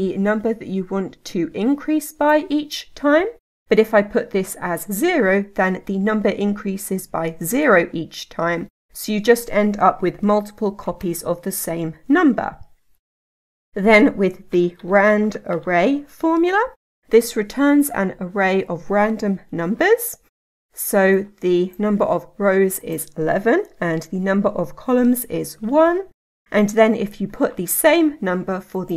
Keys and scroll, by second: 19.5 Tab.